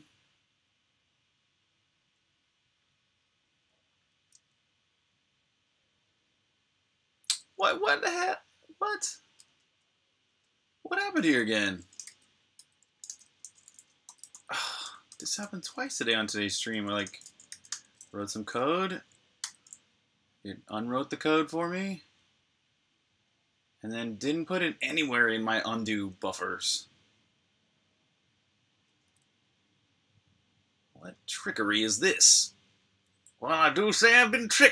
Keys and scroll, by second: 4.2 typing, 7.8 typing, 8.8-10.1 typing, 12.8 typing, 14.5 typing, 15.7-16.5 typing, 19.2 super+b, 19.4-20.8 typing, 19.8 super+h, 30.9-32.4 typing.